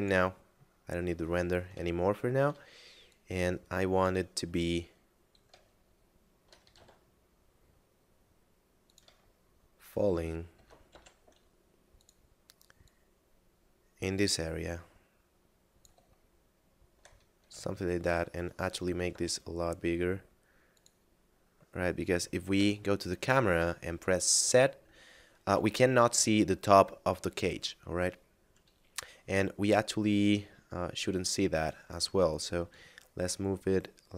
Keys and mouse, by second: 0.7 middle click, 1.9 shift+middle click, 3.1 click, 5.7 shift+middle click, 6.6 s, 8.9 click, 9.3 shift+middle click, 10.4 s, 10.8 y, 11.9 click, 16.2 shift+middle click, 17.4 Tab, 18.5 right click, 19.1 g, 19.2 z, 20.7 click, 22.5 KP_0, 23.5 z, 31.5 right click, 32.5 click.